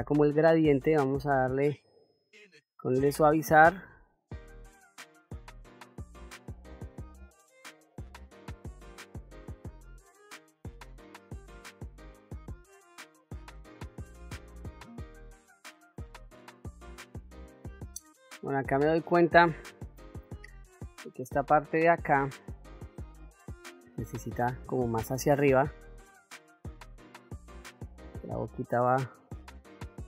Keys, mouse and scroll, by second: 6.7 middle click, 7.0-9.8 drag, 10.1-11.2 drag, 11.9-15.2 drag, 15.3 middle click, 15.7-17.2 drag, 17.3 middle click, 17.9 middle click, 20.2-22.7 drag, 25.4 click, 26.2 click, 27.3 click, 28.0 click, 29.1 click.